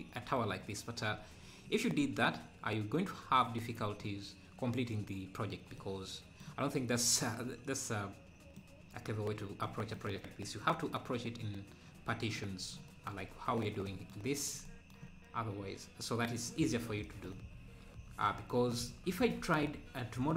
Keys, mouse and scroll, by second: 12.3-12.9 scroll down 2, 14.5 scroll down 1, 16.6 click, 18.9 click, 19.4 Tab, 19.7-20.0 scroll up 2.